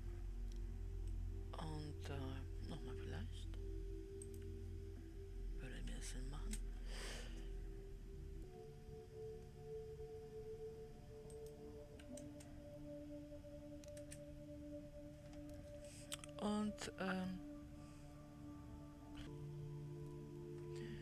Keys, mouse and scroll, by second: 1.5-4.7 middle drag, 4.7-8.4 drag, 11.8-16.4 drag, 16.4-21.0 middle drag, 19.2 w.